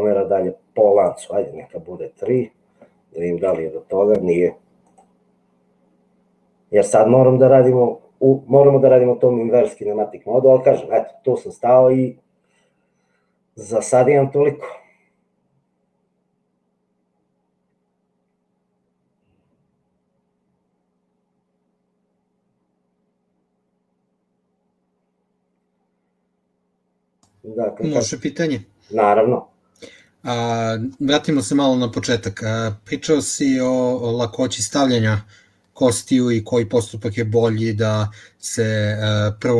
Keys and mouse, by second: 3.6 g.